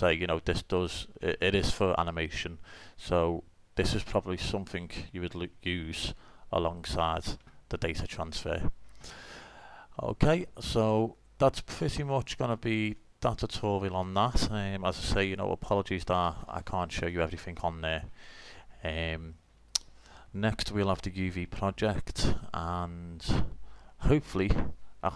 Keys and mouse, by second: 1.6 middle click, 6.1-7.9 drag, 7.9 middle click, 8.0-8.4 drag, 10.1-12.3 drag, 13.0-14.7 drag, 14.1 right click, 14.7 middle click, 14.7 click, 14.8 middle click, 15.1 right click, 15.3 Delete, 18.0-18.5 drag, 18.7-22.1 drag, 22.1-24.7 middle drag.